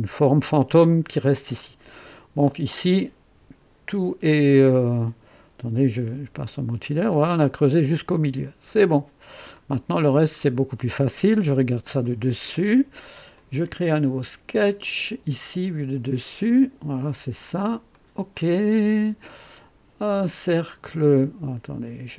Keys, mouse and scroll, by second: 0.8-4.4 drag, 4.4 right click, 6.1 &, 7.1 click, 8.3 &, 8.8-10.3 drag, 10.4 scroll down 2, 11.0-11.4 typing, 12.0-12.6 right drag, 13.3 click, 14.8 click, 16.5 click, 17.9 click, 20.2 click.